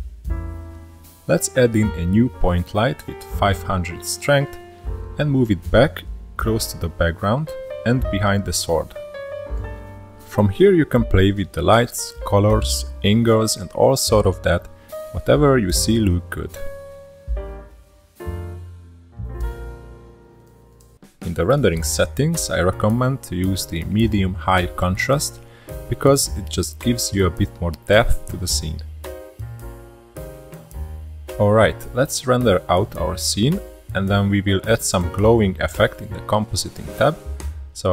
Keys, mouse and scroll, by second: 1.1 shift+a, 4.6-5.7 drag, 5.7 KP_0, 6.9 click, 12.4 click, 14.9 click, 19.6 click, 20.0 KP_0, 21.1-22.2 scroll down 7, 22.2 drag, 22.5-24.3 scroll down 11, 25.1-27.4 drag, 31.4-32.4 middle drag, 33.0-35.0 drag, 37.2 click.